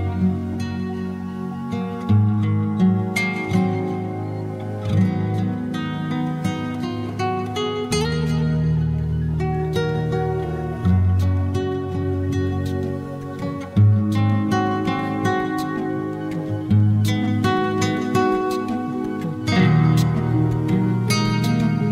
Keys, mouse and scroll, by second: 1.2-1.7 scroll down 3, 1.7-4.0 drag, 4.0 s, 4.9 click, 5.9 Delete, 6.5-7.4 scroll up 14, 7.6 shift+a, 14.0 click, 18.8 click, 21.4-21.9 drag.